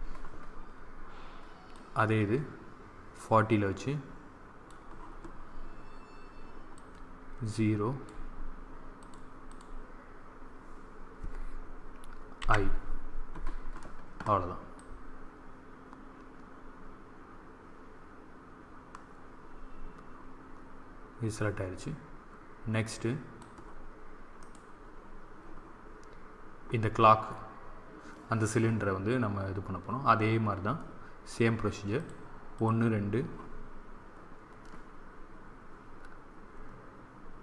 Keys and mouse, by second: 1.7-3.5 drag, 6.6-9.4 drag, 12.3 i, 14.7-16.5 drag, 24.3-26.0 right drag, 31.9-34.5 drag.